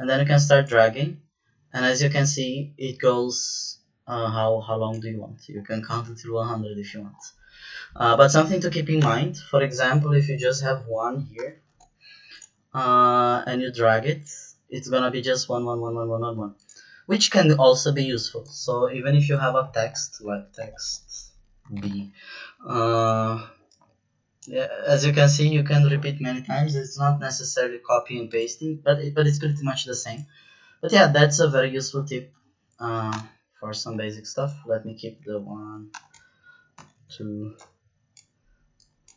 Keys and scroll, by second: 8.9 BackSpace, 10.6 2, 11.3 BackSpace, 11.5 1, 11.6 Return, 19.9-21.7 typing, 21.8 Return, 33.1 BackSpace, 35.1 1, 35.4 2, 35.9 BackSpace, 36.7 Return, 36.9 2, 37.0 Return.